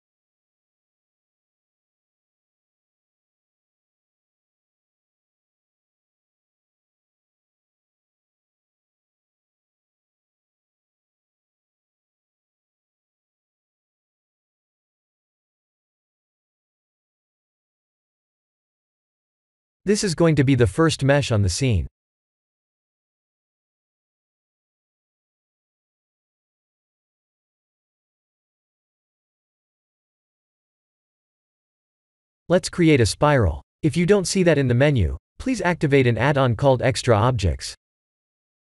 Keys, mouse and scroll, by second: 4.2 click, 5.8-6.2 scroll down 9, 7.0-8.3 scroll up 4, 8.5 ctrl+space, 9.5 ctrl+space, 11.0 ctrl+alt+q, 11.9 middle click, 12.9-13.5 scroll down 8, 13.7 shift+middle click, 13.9 shift+middle click, 18.1-19.1 scroll up 5, 19.1 middle click, 23.5 Tab, 24.0 middle click, 24.1 middle click, 24.2 middle click, 24.8-25.5 scroll down 5, 25.5 click, 26.0 KP_1, 26.9 shift+a, 38.5 click.